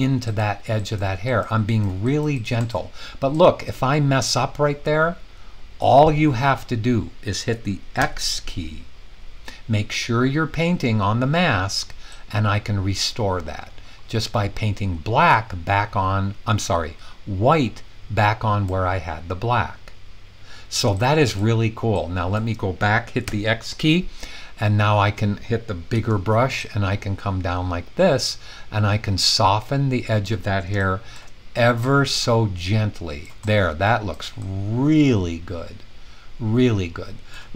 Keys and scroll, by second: 7.9 x, 23.2 x, 25.9 typing.